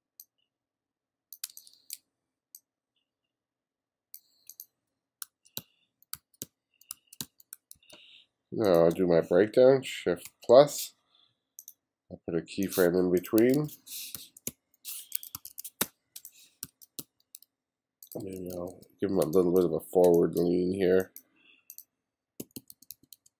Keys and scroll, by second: 1.5 space, 5.3-7.8 typing, 10.3 shift+=, 13.5-17.0 typing, 18.2 b, 19.3 space, 20.1 space, 22.4 b.